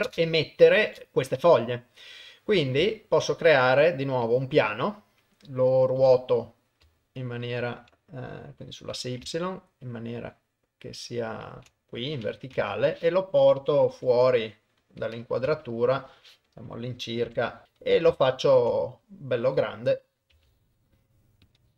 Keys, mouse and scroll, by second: 0.1 shift+space, 0.8 shift+Left, 2.8 shift+a, 6.0 r, 12.6 KP_0, 14.0 g, 15.5 KP_0, 17.3 g, 17.6 ctrl+middle click, 18.2 ctrl+middle click, 18.7 ctrl+middle click, 19.5 middle click, 20.3 s.